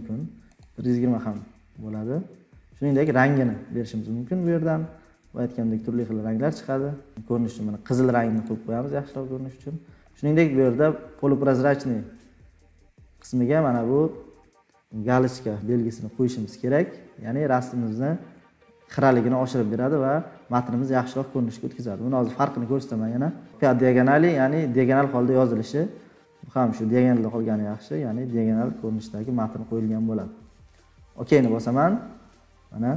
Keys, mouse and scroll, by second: 2.9 click, 8.4-9.3 drag, 9.6-11.2 drag, 31.4 click, 32.2-32.7 scroll down 7.